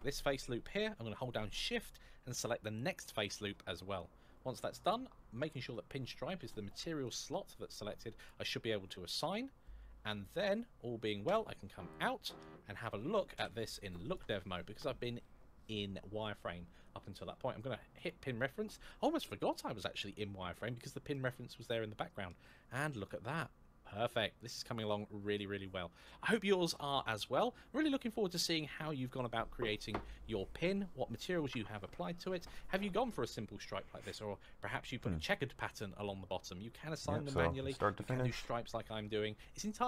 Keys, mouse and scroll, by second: 5.3 scroll up 1, 6.8 click, 11.0 Tab, 11.7 middle click, 13.1 z, 13.8 click, 14.4-16.0 scroll down 1, 17.7 click, 18.5-20.1 scroll up 1, 20.9 middle click, 22.8 middle click, 24.7-25.6 scroll down 1, 25.7 scroll up 1, 34.4-36.0 scroll down 1.